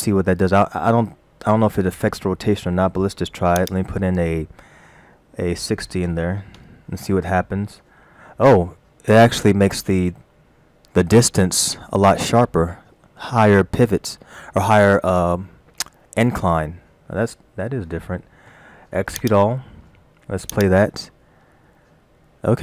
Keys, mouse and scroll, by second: 3.6 click, 19.2 click, 20.5 click.